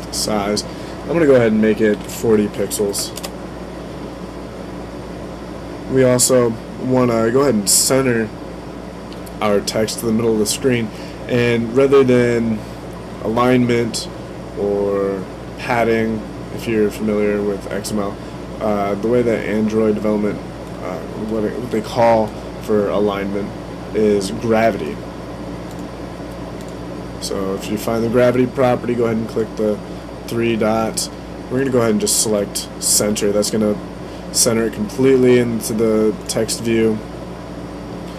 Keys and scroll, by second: 1.7-3.2 typing.